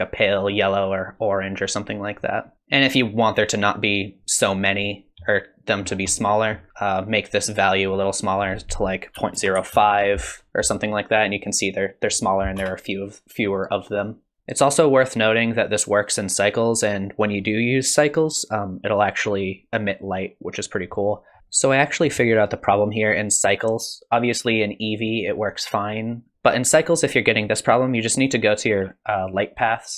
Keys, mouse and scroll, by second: 4.9 middle click, 5.8-6.7 scroll down 6, 6.1 middle click, 6.7 middle click, 6.7-7.4 scroll up 6, 8.3 click, 12.8 space, 14.4 shift+middle click, 14.4 scroll up 3, 21.2 scroll down 1.